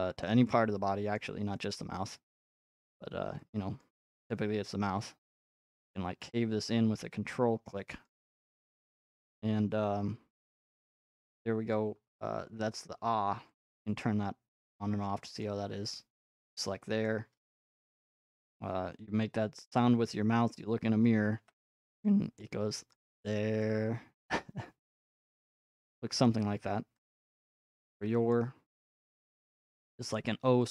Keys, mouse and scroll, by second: 0.0 click, 0.2-0.7 scroll, 1.2 scroll, 3.8 click, 4.5-5.3 typing, 6.0 click, 8.1 ctrl+click, 8.3 scroll, 11.1 middle click, 15.4 click, 16.0 click, 17.1 click, 18.2 middle click, 18.3 middle click, 20.2 middle click, 21.4 g, 22.9 click, 23.5-25.0 drag, 27.2 click, 27.6 click, 30.1 click.